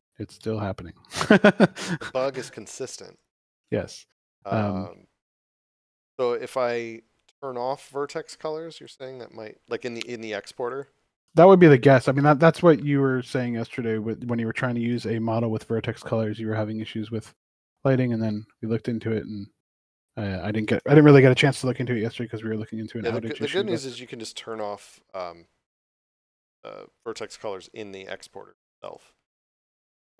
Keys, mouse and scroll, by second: 0.0-1.0 typing, 3.2 click, 8.6 click, 13.1 click, 15.3 click.